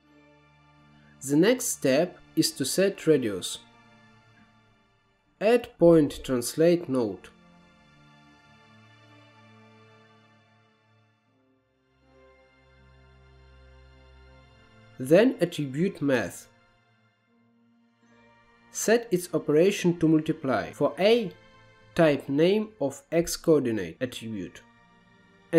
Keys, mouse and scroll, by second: 1.2 scroll down 1, 1.4-2.1 middle drag, 2.7 shift+a, 8.2-8.8 scroll up 5, 8.9 middle click, 9.2-10.6 drag, 10.6-11.3 scroll down 2, 11.3-11.9 drag, 11.9-12.4 scroll down 1, 12.6 scroll down 2, 12.7-13.2 drag, 13.2 g, 13.7 middle click, 13.9 scroll up 1, 14.2 middle click, 14.6 click, 15.0 shift+a, 17.8 middle click, 18.3 click, 19.6-25.5 drag.